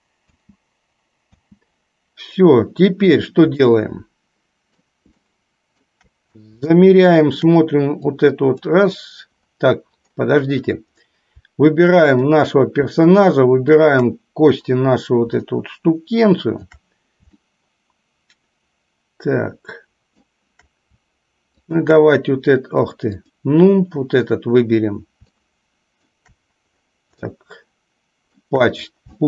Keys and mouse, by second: 0.4 space, 1.5 space, 3.7-5.0 middle drag, 5.4 shift+middle click, 7.0 shift+middle click, 8.4-8.9 drag, 12.3 click, 13.9 shift+click, 15.5-16.9 shift+middle drag, 17.5-20.4 shift+middle drag, 21.8 shift+click, 25.4 shift+middle click, 27.5 shift+middle click.